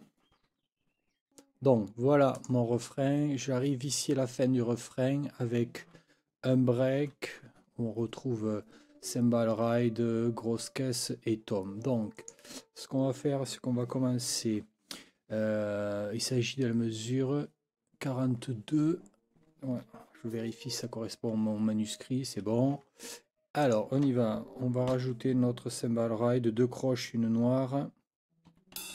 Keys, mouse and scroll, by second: 2.4 click, 12.2 click, 23.6 click, 24.9 n, 28.5 4, 28.8 d.